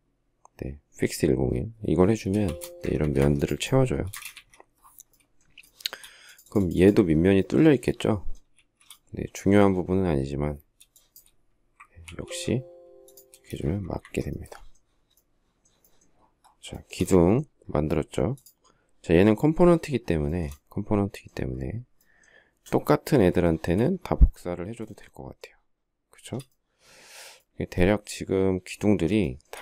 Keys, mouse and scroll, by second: 2.1 space, 2.2 Escape, 2.6 Escape, 2.8 Escape, 3.9 space, 4.3 Escape, 5.5 shift+middle click, 8.4 shift+z, 11.8 ctrl+f, 13.1 space, 13.2 Escape, 13.4 Escape, 14.1 Escape, 16.5 shift+middle click, 20.2 shift+middle click, 23.2 shift+middle click, 24.6 shift+middle click, 29.0 shift+middle click.